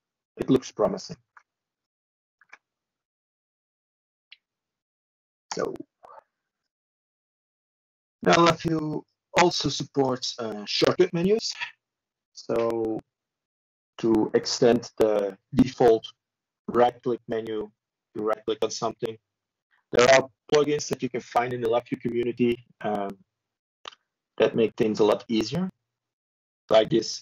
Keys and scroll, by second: 0.3 ctrl+z, 2.6 ctrl+z, 4.4 ctrl+space, 5.3 h, 6.9 o, 9.7-10.4 typing, 13.6 ctrl+z, 15.8 ctrl+space, 17.4-18.2 typing, 19.3-20.1 typing, 23.2 ctrl+z.